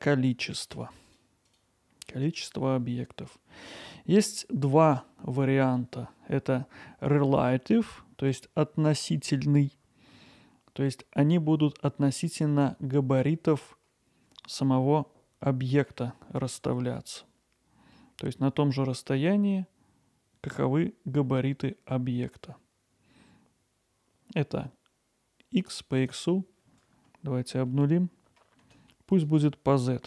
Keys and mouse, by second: 1.1-3.8 drag, 5.6-17.0 drag, 17.0-17.9 middle drag, 26.1-30.0 drag.